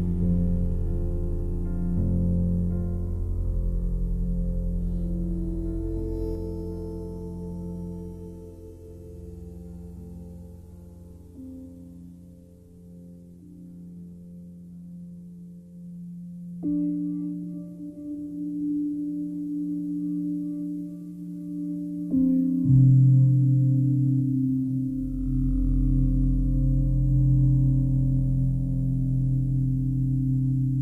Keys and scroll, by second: 20.7 ctrl+d, 24.4 space.